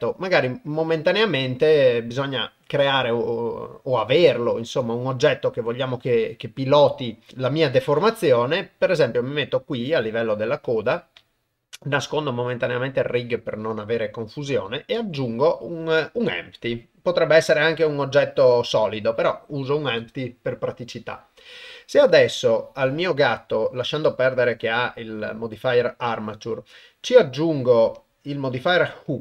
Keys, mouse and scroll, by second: 2.6-4.1 middle drag, 4.4 ctrl+middle click, 6.4 middle click, 7.7 KP_0, 15.0 shift+a, 24.0 click, 26.8 click, 28.1-29.2 drag.